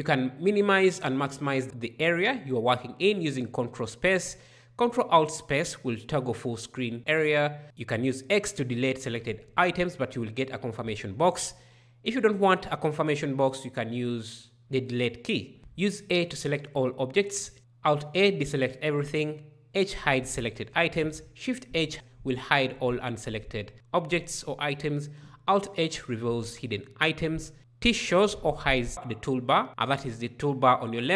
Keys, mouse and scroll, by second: 5.0 ctrl+alt+space, 8.8 x, 12.2 Delete, 15.6 a, 17.6 alt+a, 19.6 h, 21.1 shift+h, 25.3 alt+h, 28.1 t.